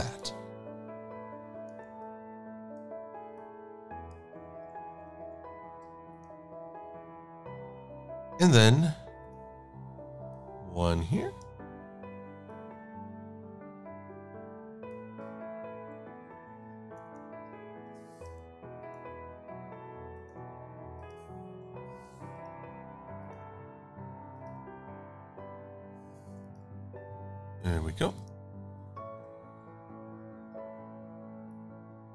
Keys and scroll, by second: 5.6 shift+super+a, 17.0 super+=, 19.2 Up, 29.0 shift+x.